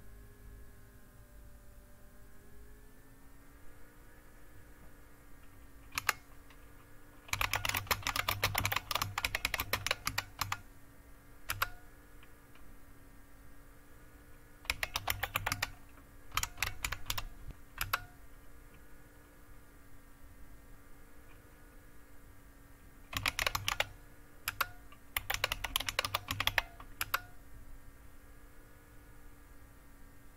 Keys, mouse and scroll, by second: 5.9 q, 7.0-11.9 typing, 22.9-27.1 typing, 24.4 Return.